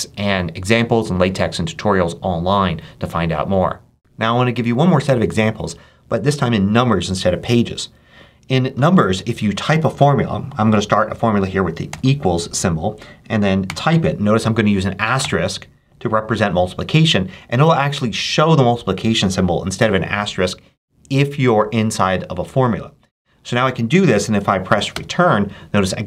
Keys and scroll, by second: 11.8 =, 13.5 6, 14.1 shift+6, 15.1 shift+8, 19.6 7, 24.8 Return.